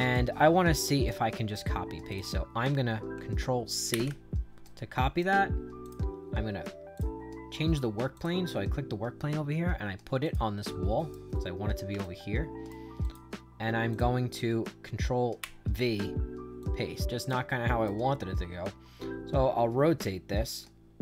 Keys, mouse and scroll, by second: 1.0 right click, 2.0 click, 3.8 ctrl+c, 4.6 right click, 5.7 click, 6.9 click, 8.1 click, 10.1 click, 10.6 right click, 11.9 shift+right click, 12.9 click, 13.8 click, 15.3 ctrl+v, 16.5 click, 17.2 right click.